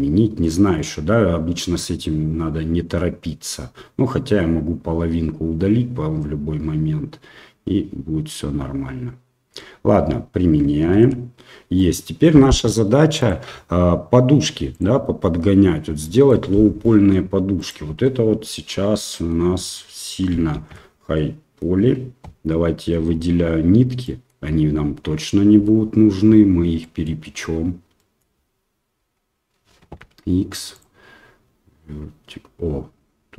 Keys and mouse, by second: 0.4 middle click, 11.1 ctrl+a, 11.7 middle click, 13.2 click, 14.7 click, 16.0 middle click, 16.8 middle drag, 18.5 Tab, 19.0 middle click, 20.7 alt+a, 21.1 middle click, 23.2 l, 24.1 middle click, 25.6 l, 25.8 l, 26.8 middle click, 28.1 middle click, 29.1 l, 30.0 x.